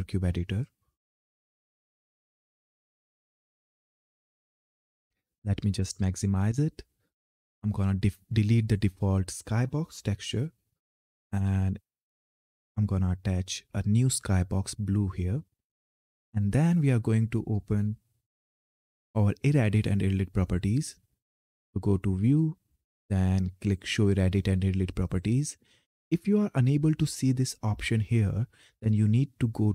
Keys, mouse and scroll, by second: 4.4 click, 8.1 click, 11.0 scroll down 1, 13.9 click, 19.4 click, 24.7 click.